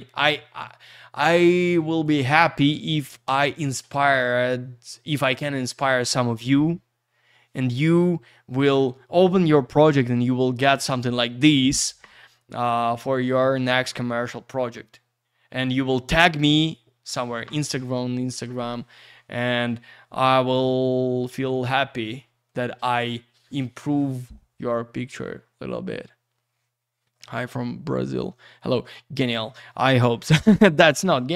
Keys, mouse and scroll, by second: 2.2 click, 3.2 click, 25.3-26.6 scroll down 1.